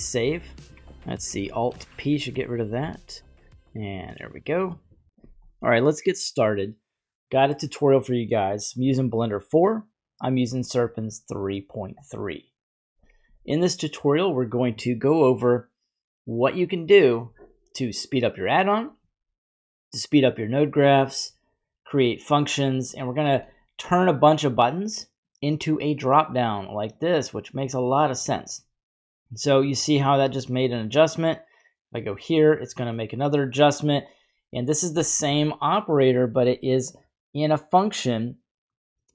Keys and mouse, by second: 0.8 typing, 1.7 alt+p, 2.8 g, 4.0 click, 25.8-28.2 drag, 31.2-32.2 drag, 34.0-39.1 drag.